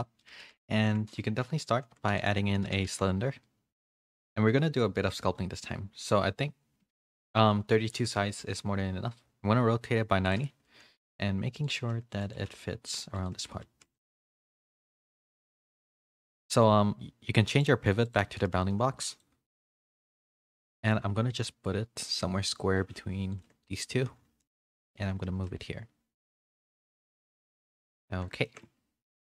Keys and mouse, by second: 0.0 middle click, 0.5 a, 1.7 alt+h, 2.1 a, 2.5 a, 2.7 a, 4.5 s, 7.1 middle click, 8.4 r, 11.0 s, 11.6-13.3 drag, 11.7 g, 12.3 g, 13.6 s, 14.3 s, 15.1 g, 15.7 g, 17.5-18.2 drag, 18.6 s, 19.8 KP_3, 20.3 z, 20.8-21.2 shift+middle drag, 21.2 g, 23.8 middle click, 24.0 z, 24.7 s, 27.0 a, 27.1 a, 27.3-27.9 middle drag, 28.0 a, 28.2 a, 28.5 shift+middle click.